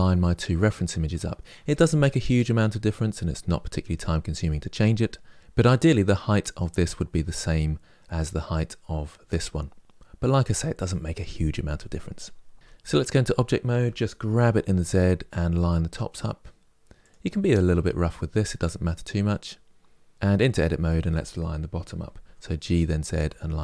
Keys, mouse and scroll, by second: 12.5 Tab, 13.6 g, 18.2-20.1 middle drag, 20.1 Tab, 20.3 click, 21.5 g.